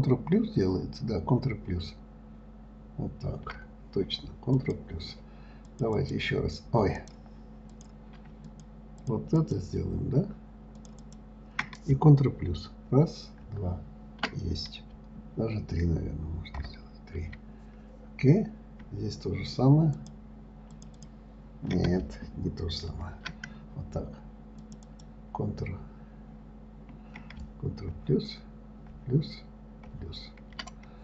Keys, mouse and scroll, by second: 0.8 ctrl+KP_Add, 1.9 ctrl+KP_Add, 4.9 click, 6.0 click, 6.4 click, 7.3 click, 8.1 click, 8.8 shift+click, 9.4 shift+click, 9.7 shift+click, 11.1 shift+click, 11.4 shift+click, 13.3 ctrl+KP_Add, 13.7 ctrl+KP_Add, 16.9 ctrl+KP_Add, 20.3 shift+click, 21.1 shift+click, 21.4 shift+click, 23.2 ctrl+z, 25.0 shift+click, 25.2 shift+click, 29.2 ctrl+KP_Add.